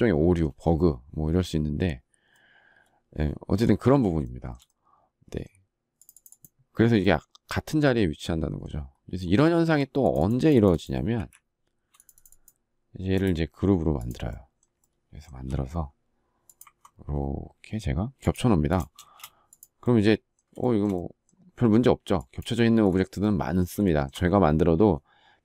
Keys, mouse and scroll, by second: 4.2 shift+middle click, 9.4 shift+middle click, 11.1 Delete, 18.9 space, 20.5 shift+middle click, 23.8 shift+middle click.